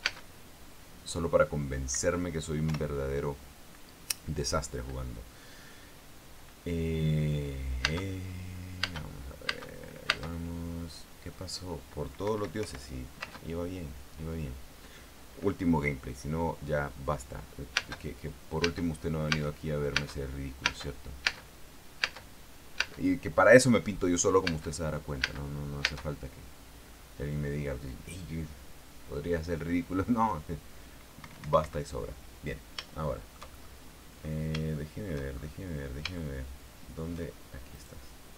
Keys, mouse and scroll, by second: 0.1 space, 0.7 space, 2.6 Escape, 3.4 p, 8.5 space, 9.5 space, 10.2 space, 12.9 Escape, 13.3 p, 13.9 space, 18.4-21.3 typing, 22.7 space, 23.5 space, 25.1 space, 25.9 space, 31.9 Escape, 33.7 shift+middle click, 34.5-35.4 shift+scroll down 3, 35.4 shift+middle click, 36.1-36.9 shift+scroll up 3, 36.9-37.9 shift+middle drag.